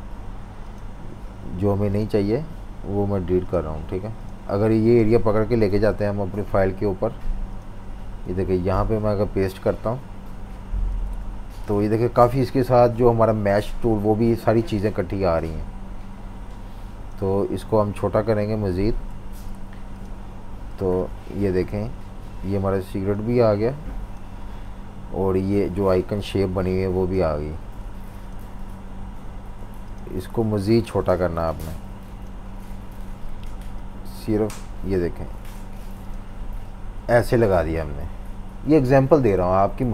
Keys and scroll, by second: 1.0 Delete, 2.2 Delete, 5.6 super+c, 8.2 super+v, 12.2 super+-, 13.7 v, 18.8 super+g, 19.4 v, 20.7 typing, 22.4 v, 27.8 v.